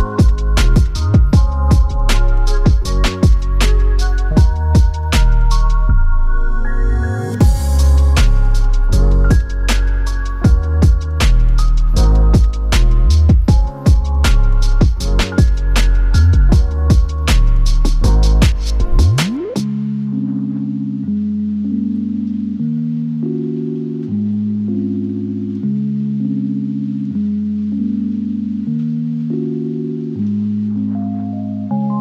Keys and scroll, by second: 2.5 Delete, 6.3 super+y, 17.4 super+j, 21.1 super+y, 24.7 space.